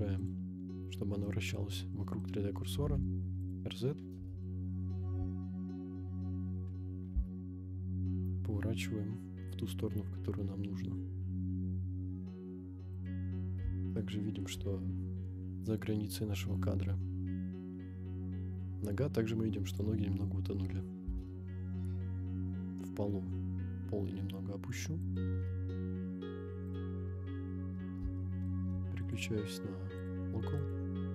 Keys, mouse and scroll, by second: 1.0 scroll down 1, 1.2-2.2 middle drag, 2.7 r, 3.5 click, 4.1 KP_0, 6.0 ctrl+z, 6.1-6.5 scroll down 2, 6.6 scroll up 1, 7.0 r, 7.1 z, 13.0 click, 13.4 scroll up 1, 14.0-14.4 shift+middle drag, 14.7 scroll up 2, 19.7 click, 21.0 g, 25.1 shift+drag, 25.6 scroll down 2, 26.7 click, 27.5-27.8 scroll up 1, 27.8 scroll down 2, 28.2-28.5 shift+middle drag, 29.0-30.3 drag, 30.6-31.1 drag.